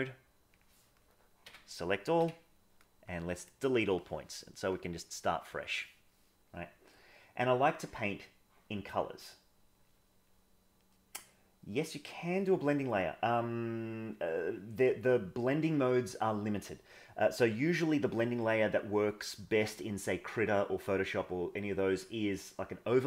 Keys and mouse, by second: 0.0 click, 2.2 x, 4.7-5.6 drag, 13.2-23.0 drag.